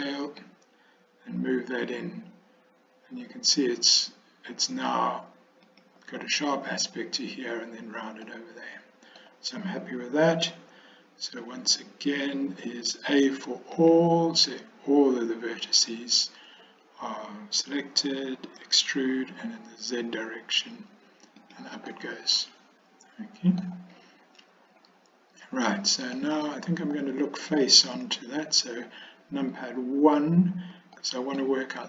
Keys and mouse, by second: 0.3 s, 8.3-9.4 drag, 13.8 a, 18.7 e, 22.1-23.7 middle drag, 26.4 middle click, 28.0 KP_1, 31.1 shift+middle click.